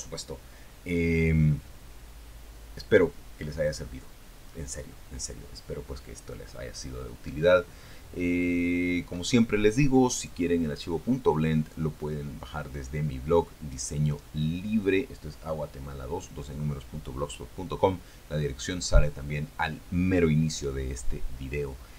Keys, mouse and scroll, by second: 4.8-5.2 scroll up 2, 5.7-6.3 scroll down 2.